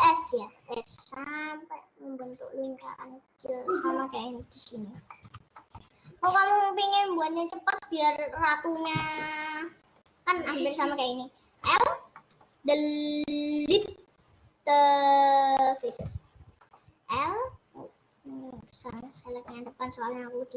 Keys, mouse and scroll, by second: 1.0-3.1 middle drag, 3.1 click, 4.9 scroll down 3, 5.3-9.5 shift+middle drag, 9.5-10.1 scroll down 3, 10.1 click, 10.4 scroll up 2, 11.7 l, 12.3-16.0 middle drag, 16.0 Delete, 16.7 middle click, 17.2 l, 17.4 middle click, 18.6 scroll down 4, 18.9 click, 19.4 scroll up 3, 19.8-20.5 middle drag.